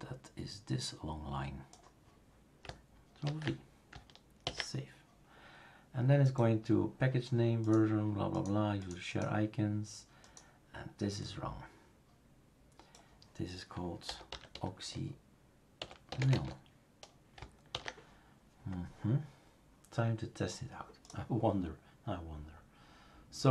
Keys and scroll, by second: 3.2 ctrl+v, 4.4 ctrl+s, 13.8-17.0 typing, 17.7 ctrl+s.